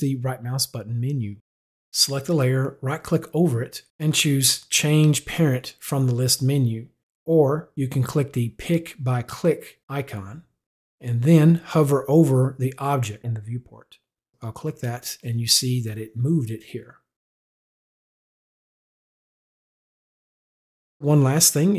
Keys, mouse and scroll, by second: 0.4 click, 1.6 click, 2.3 right click, 10.6 click, 14.3 click, 18.3 click, 20.1 click.